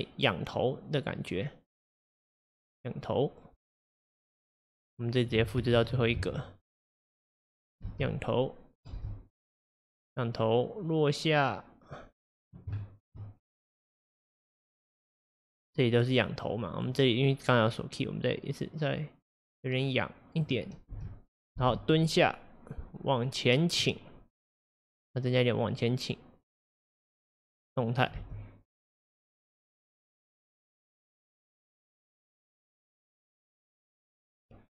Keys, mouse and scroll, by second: 4.7-5.8 drag, 5.8 shift+d, 7.9 space, 9.0 space, 10.1-12.8 drag, 12.8-13.4 shift+middle drag, 13.4-14.3 scroll up 2, 14.3-15.2 scroll up 1, 15.2-18.3 drag, 21.0 space, 21.6 space, 22.1-25.4 drag, 28.2 space.